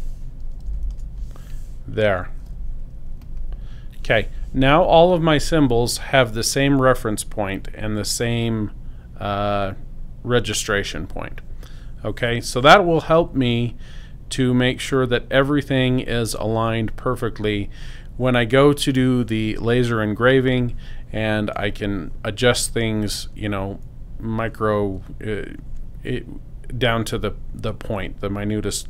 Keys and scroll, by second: 0.5 0, 0.6 Tab, 0.7 0, 0.9 Return.